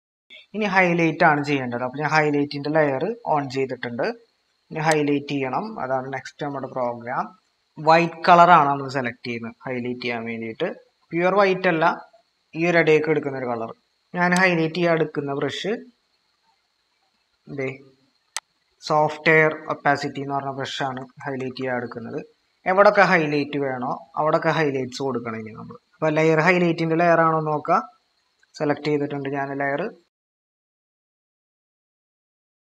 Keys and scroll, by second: 0.9 ctrl+-, 6.7 ctrl+-, 20.7-21.8 typing, 25.8 typing, 29.3 ctrl+=, 30.8-32.0 typing.